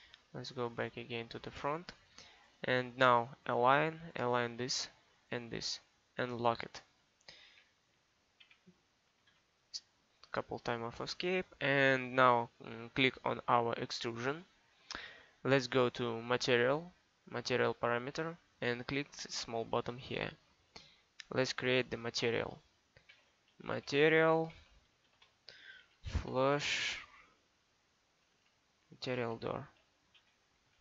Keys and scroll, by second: 8.5 Escape, 23.2-27.1 typing, 30.3 d, 30.6 o.